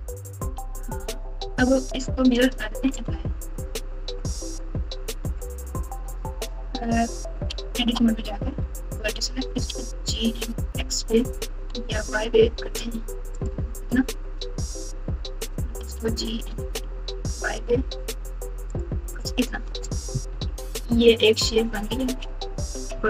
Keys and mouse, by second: 0.5-1.1 ctrl+KP_8, 2.2 Tab, 2.8 Tab, 4.3 Tab, 6.0 1, 7.5 Tab, 8.0 1, 8.9 click, 9.6 g, 15.8 g, 19.7 Tab, 20.3-21.8 typing.